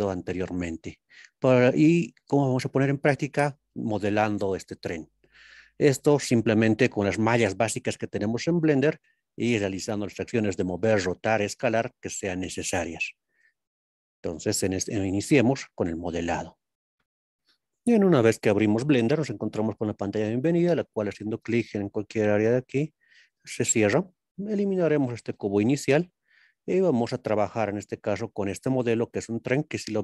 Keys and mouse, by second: 5.5-7.2 middle drag, 23.0 click, 25.3 x.